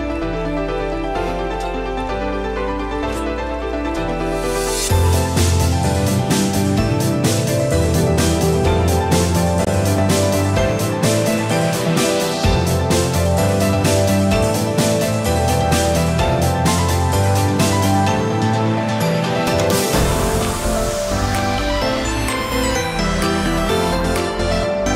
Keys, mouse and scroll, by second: 3.5 click, 8.0 Tab, 8.3 middle click, 9.1 shift+middle click, 9.4 scroll up 5, 9.7 shift+middle click, 10.1 middle click, 10.4 shift+middle click, 10.8 middle click, 11.3 Tab, 11.9 shift+middle click, 12.9 alt+a, 14.0 l, 14.5 l, 15.2 middle click, 15.9 shift+middle click, 17.3 l, 18.9 scroll down 2, 19.2 shift+middle click, 19.7 shift+middle click, 20.1 middle click, 21.7 l, 24.1 ctrl+z, 24.7 l.